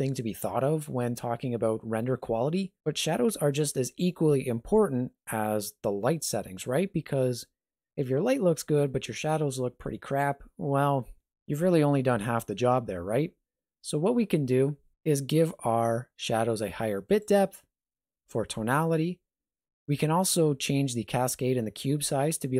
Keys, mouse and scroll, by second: 17.1 click.